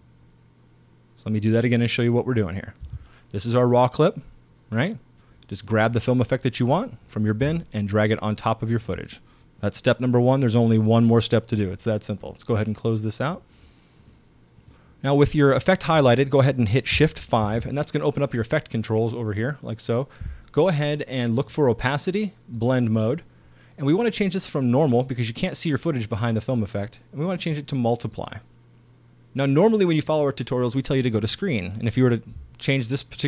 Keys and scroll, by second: 2.9 BackSpace, 17.5 shift+5.